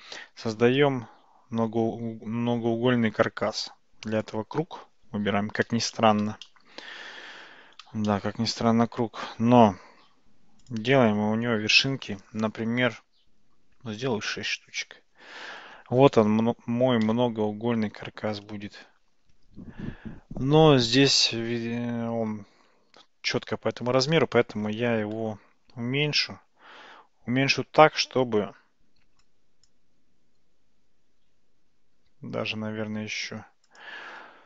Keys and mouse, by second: 0.7 shift+a, 6.6 shift+middle click, 8.2-8.7 shift+middle drag, 10.6-15.2 drag, 26.1 s, 32.3 s.